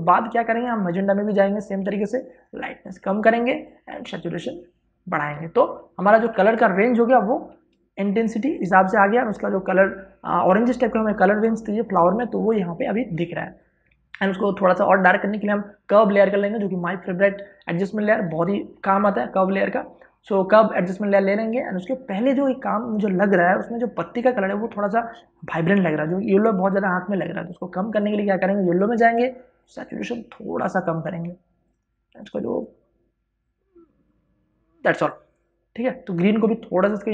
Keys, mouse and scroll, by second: 6.0 space, 6.2-37.1 ctrl+drag.